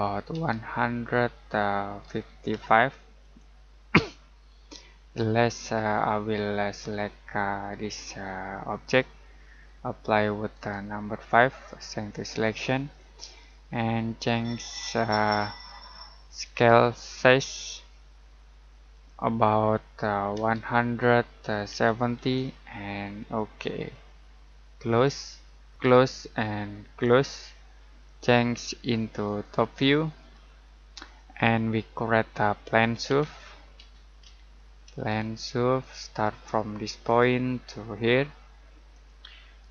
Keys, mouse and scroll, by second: 1.8-3.0 typing, 3.2 click, 8.7 click, 10.5 right click, 14.9 click, 18.9 click, 20.3 1, 21.9-22.6 typing, 23.1 click, 31.4-32.0 scroll down 1, 32.0 middle click, 32.7-34.7 typing, 35.8 click.